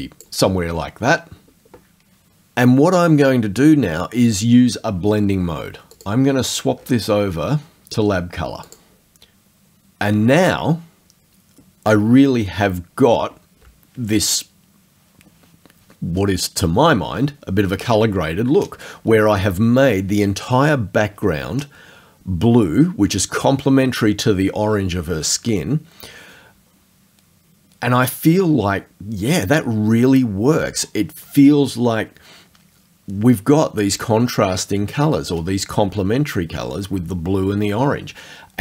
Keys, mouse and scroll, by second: 0.4-5.9 middle drag, 5.9 click, 8.7 click.